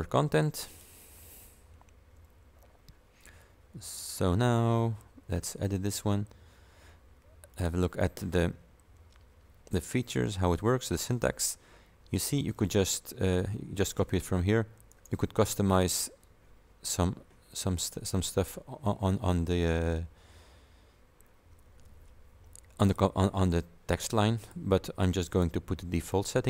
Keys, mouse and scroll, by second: 0.7 click, 4.1 click, 7.6 click, 8.7-9.6 scroll down 3, 9.9-10.7 scroll down 3, 12.6-14.2 drag, 15.0 right click, 15.8 click, 22.9 click, 24.4 click, 25.4 click, 26.2 click.